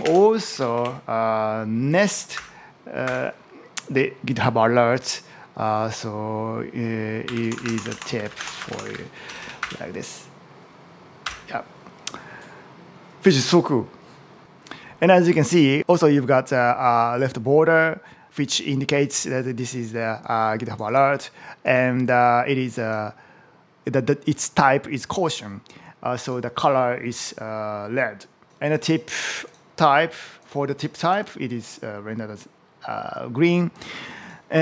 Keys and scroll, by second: 0.1-1.1 typing, 2.2 Return, 10.4 Return.